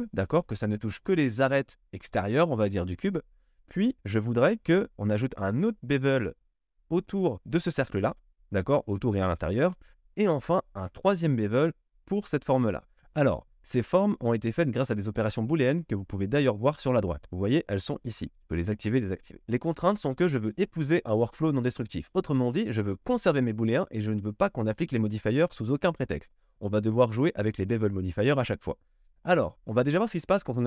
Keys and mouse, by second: 4.3 click, 11.2-29.5 middle drag, 18.1 click, 18.5 click, 18.7 click, 19.3 click, 29.5-30.6 drag.